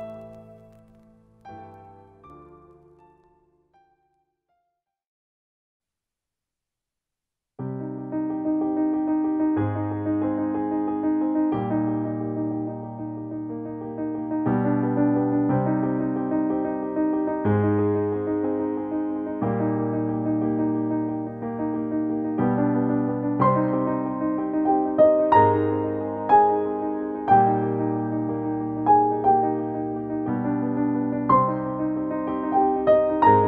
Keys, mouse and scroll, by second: 1.1 click, 3.5 click, 8.4 click, 8.5 ctrl+space, 8.7 ctrl+click, 8.9 ctrl+space, 10.6 click, 19.1 click, 23.3 click, 27.4 1, 28.2 Return, 29.2 click, 31.0 2, 31.8 Return.